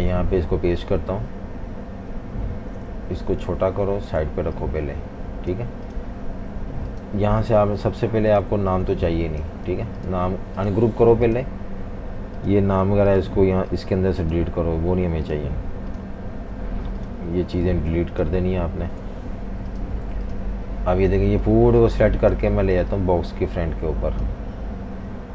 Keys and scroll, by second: 8.5-10.3 typing, 16.3 Delete, 17.4 Delete, 18.5 Delete.